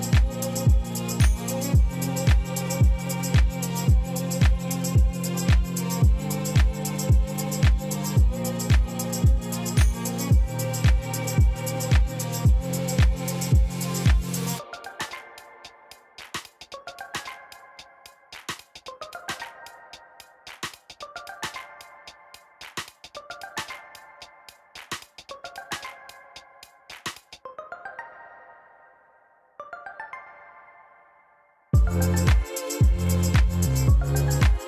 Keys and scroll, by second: 1.5 2, 3.3 shift+s, 4.8 Tab, 6.7 shift+a, 18.6 i, 18.8 m, 20.1 a, 20.8 g, 21.0 e, 27.9 r, 30.1 1, 30.8 Return, 33.6 Tab.